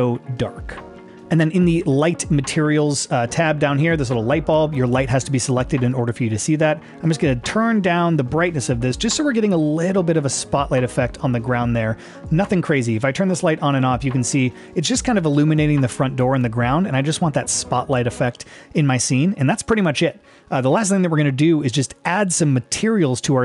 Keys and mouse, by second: 0.5-1.1 middle drag, 7.2-12.4 drag, 13.8 click, 14.6 click, 15.7 click, 16.3 click, 22.0 click.